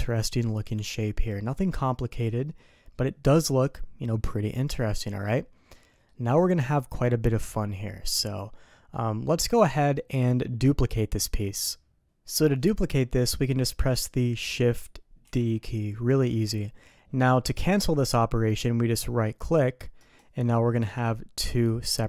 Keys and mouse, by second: 5.7 middle drag, 8.9-9.9 middle drag, 12.2 middle click, 12.9 middle click, 15.2 shift+d, 20.8 g.